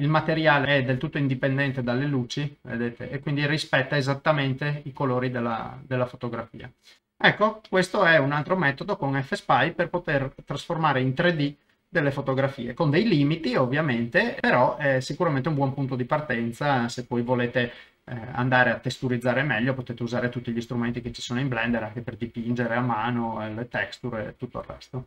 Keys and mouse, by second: 0.7 ctrl+middle click, 1.4 click, 1.8-3.3 middle drag, 3.5 ctrl+middle click, 4.1 middle click, 5.1 middle click, 5.6 middle click, 6.7 shift+middle click, 7.0 middle click, 8.0 ctrl+middle click, 8.4-15.7 middle drag, 18.0 middle click, 20.0-21.5 middle drag, 22.1-23.3 middle drag.